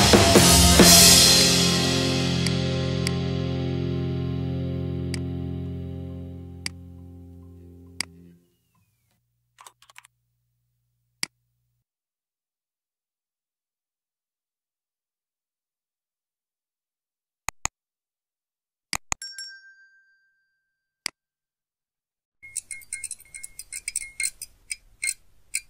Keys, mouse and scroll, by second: 0.3 click, 1.4 click, 2.5 click, 3.1 click, 4.3 middle click, 5.2 click, 6.7 click, 8.0 click, 9.3-10.4 typing, 11.3 click, 14.3 click, 17.8 click, 19.0 click, 20.6-21.7 drag, 22.1 click.